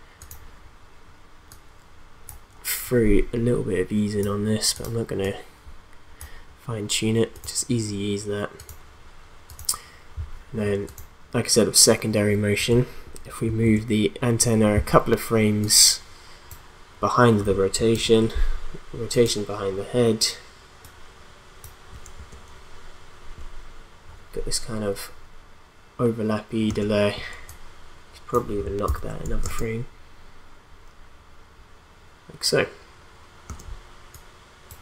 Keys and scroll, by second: 13.6 alt+Right, 17.9 alt+Right, 22.1 space, 26.7 space, 28.9 alt+Right, 29.4 space, 33.5 space.